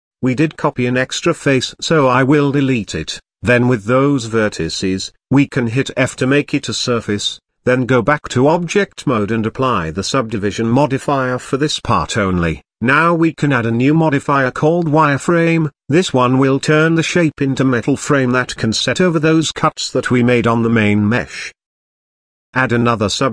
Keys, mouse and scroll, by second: 0.0 ctrl+z, 0.4-1.4 middle drag, 1.4 click, 2.3 click, 3.0 shift+click, 3.6 x, 4.9 middle click, 5.6 scroll down 2, 5.9 a, 6.6 f, 7.0 middle click, 7.7-8.5 scroll up 1, 8.5-9.6 drag, 9.6 Tab, 10.6-12.3 drag, 12.3 Tab, 12.6-13.4 scroll up 1, 13.4-15.2 drag, 15.2 Tab, 15.5-17.5 middle drag, 18.1-20.1 drag, 20.1-20.4 shift+middle drag, 20.4-21.6 scroll up 3, 21.6-22.4 drag, 22.4-22.7 scroll down 1, 22.7-23.3 middle drag.